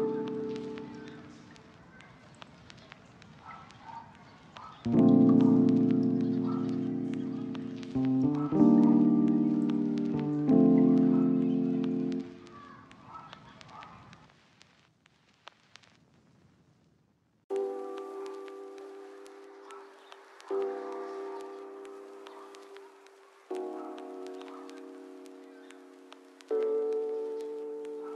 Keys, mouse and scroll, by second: 0.4 ctrl+click, 0.7 middle click, 1.3 1, 1.6 middle click, 3.0 double click, 4.5 shift+middle click, 6.3 shift+click, 6.4 shift+double click, 6.7 shift+click, 7.3-7.7 scroll down 1, 7.8 KP_7, 8.2 g, 8.9 ctrl+click, 9.2 middle click, 9.6 scroll up 1, 11.5 middle click, 13.3 middle click, 13.7 scroll up 1, 13.9 ctrl+middle click, 14.6 ctrl+middle click, 15.1 shift+middle click, 16.0 ctrl+click, 16.4 ctrl+click, 17.0 ctrl+click, 17.7 ctrl+click, 18.4 u, 19.9 middle click, 20.6 ctrl+click, 20.7 ctrl+middle click, 21.1 middle click, 21.7 ctrl+click, 21.9 middle click, 22.7 ctrl+click, 23.0 u, 23.8 middle click, 25.0 u, 25.4 a, 25.6 u, 26.4 scroll up 1, 26.8 shift+middle click.